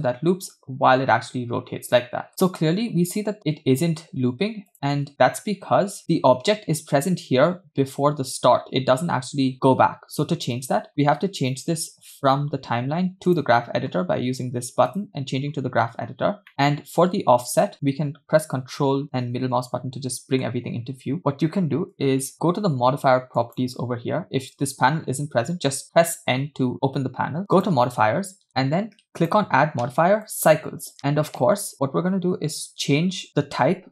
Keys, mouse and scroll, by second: 2.3 space, 3.5 click, 4.1 space, 4.7 click, 5.1 space, 5.3 space, 6.0 click, 15.0 click, 16.0-16.4 scroll down 4, 16.7 middle click, 17.7-20.6 ctrl+middle drag, 22.0 click, 23.5 click, 25.4 n, 25.8 n, 27.6 click, 29.3-30.6 drag.